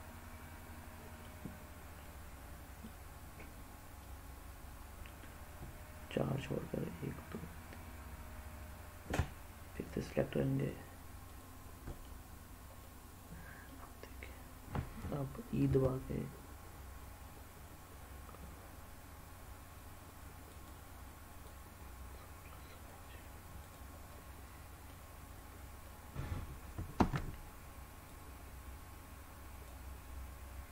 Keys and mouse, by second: 0.0-1.2 middle drag, 2.0 middle click, 4.0-5.0 middle drag, 9.6 shift+click, 10.6 shift+click, 11.2 shift+click, 11.9 middle click, 12.8 middle click, 15.6 e, 20.4 click, 21.4-22.8 drag, 23.6 click, 24.0 middle click, 25.8 middle click, 27.0 ctrl+z, 28.1-29.6 drag.